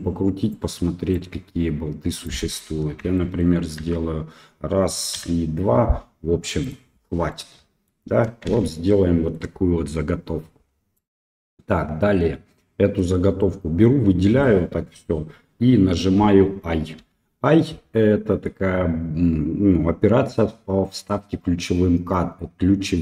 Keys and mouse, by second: 1.1-2.3 drag, 3.1 shift+middle drag, 3.8 shift+d, 7.3-7.9 middle drag, 8.5 shift+z, 8.7-9.3 middle drag, 10.9 middle click, 12.7 click, 13.4-14.4 middle drag.